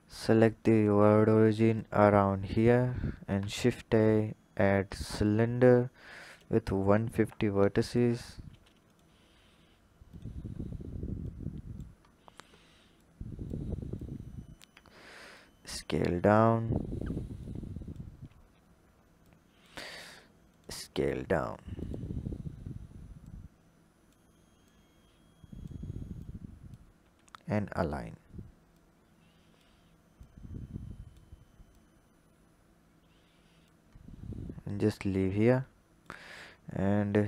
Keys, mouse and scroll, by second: 2.5 click, 2.9-3.2 scroll up 4, 3.2 shift+a, 6.3-7.9 drag, 8.4 s, 10.1-12.0 drag, 12.0-12.9 scroll up 4, 12.9 click, 13.9 drag, 15.6 s, 17.4-18.2 drag, 18.2-19.2 scroll up 5, 19.2 drag, 20.4 drag, 20.8 s, 22.1-23.2 scroll up 2, 23.2 click, 24.6 click, 26.1 click, 26.9 s, 28.7 click, 30.1 click, 31.6 click, 33.9-35.4 scroll down 9, 35.4-37.2 drag.